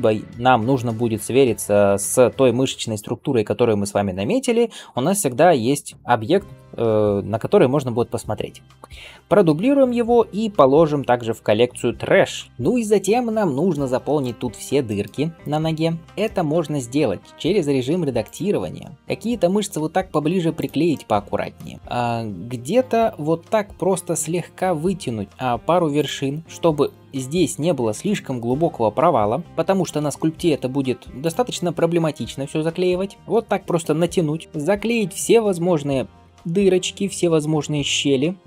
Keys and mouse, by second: 9.3 shift+d, 10.5 m, 16.7 Tab, 19.0 g, 23.2 g, 26.4 g, 29.2 click, 29.3-36.2 middle drag, 29.5 g, 31.9 g, 34.4 g, 36.2 g, 38.3 g.